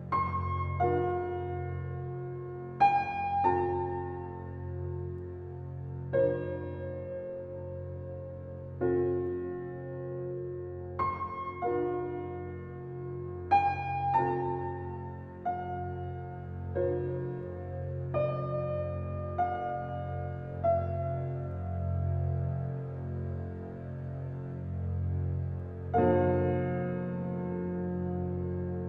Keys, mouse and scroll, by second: 1.4 alt+click, 2.2-3.8 right drag, 3.8 click, 4.9-6.6 typing, 6.1 middle click, 7.0-8.8 drag, 9.4-10.4 typing, 9.6 middle click, 11.0-15.7 drag, 15.7 -, 15.8-23.4 drag, 23.4 alt+click, 24.2 right click, 25.5 click, 26.3 6, 27.3-28.8 alt+drag.